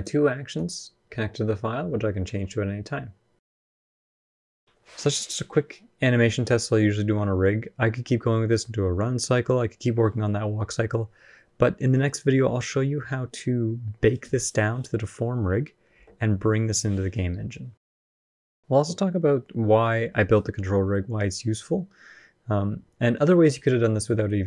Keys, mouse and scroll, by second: 15.7 space.